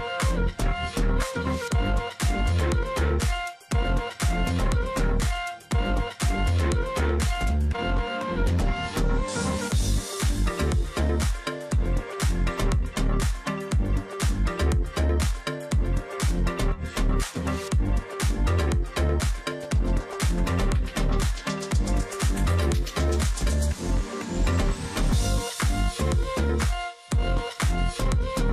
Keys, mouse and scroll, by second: 0.6 alt+scroll down 1, 0.8 space, 1.2 alt+scroll up 1, 1.3 space, 2.2 alt+scroll down 1, 2.4 space, 2.8 alt+scroll up 1, 9.0 space, 9.8 ctrl+click, 10.4 alt+scroll up 1, 10.5 space, 12.2 double click, 13.7 ctrl+click, 13.9-14.3 alt+scroll up 1, 16.3 ctrl+click, 19.2 shift+x, 21.2 alt+scroll down 1, 21.9 space, 22.2-22.7 alt+scroll up 1, 22.7-23.3 alt+scroll up 1, 24.5 ctrl+click, 24.9-25.4 alt+scroll up 1.